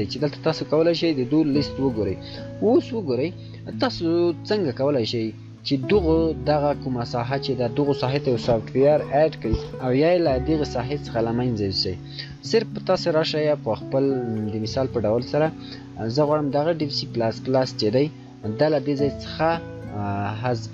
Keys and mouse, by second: 4.8 shift+click, 18.3 shift+right click.